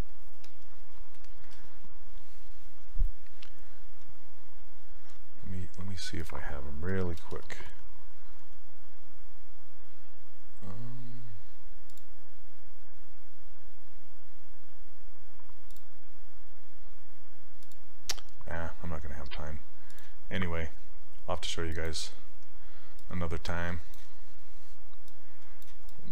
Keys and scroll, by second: 6.7-7.7 typing.